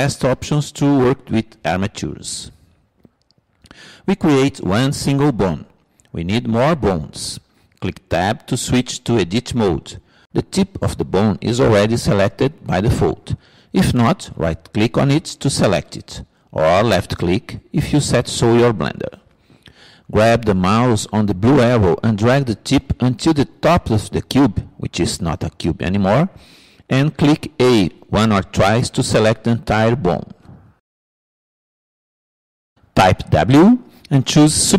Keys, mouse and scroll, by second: 3.3-5.0 middle drag, 5.1 middle click, 11.1 Tab, 24.6-26.4 drag, 30.4 a, 30.8 a, 34.2 w.